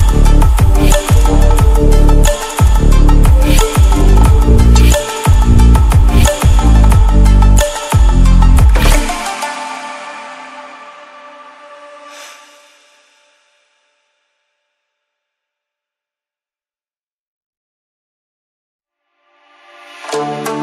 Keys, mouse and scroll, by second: 8.2-8.9 typing, 14.3-19.6 drag.